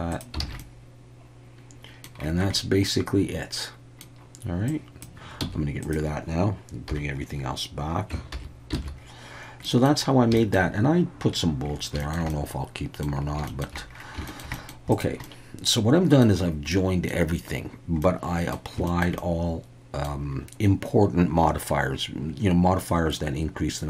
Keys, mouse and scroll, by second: 0.5 alt+a, 0.6-2.0 middle drag, 2.5-4.0 middle drag, 4.7 click, 5.4 x, 6.9 /, 7.0 click, 8.3 alt+h, 8.8 alt+a, 9.6 middle click, 10.4 shift+middle click, 12.0 shift+middle drag, 12.3-13.1 middle drag, 13.5 shift+middle drag, 14.3 shift+middle click, 14.5 middle click, 15.2-16.2 middle drag, 16.7-17.1 middle drag, 18.0-18.5 middle drag, 18.9 shift+middle click, 19.2-20.0 middle drag, 23.2-23.8 middle drag.